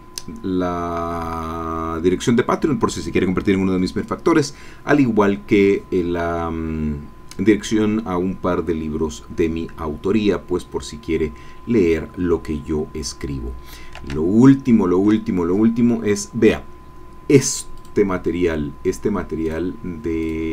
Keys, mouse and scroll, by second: 11.8-12.8 scroll down 2, 12.8-13.1 scroll up 2, 14.0 alt+Tab, 19.5 click, 20.2 click.